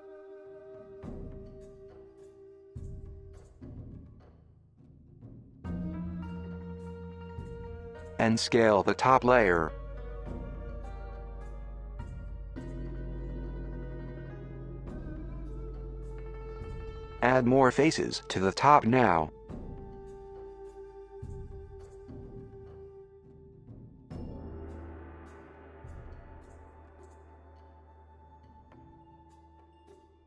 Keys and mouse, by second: 0.0 click, 0.4 alt+click, 1.2 s, 3.2 s, 5.3 click, 5.9 ctrl+r, 7.7 click, 8.1 alt+click, 8.6 s, 13.8-16.2 middle drag, 16.0 KP_1, 16.8 click, 17.8 KP_1, 20.6 middle click, 21.1-23.2 drag, 23.7 KP_1, 24.2 g, 25.0-26.3 middle drag, 26.1 KP_1, 27.1-27.6 middle drag, 28.0 Tab, 28.2-30.2 middle drag.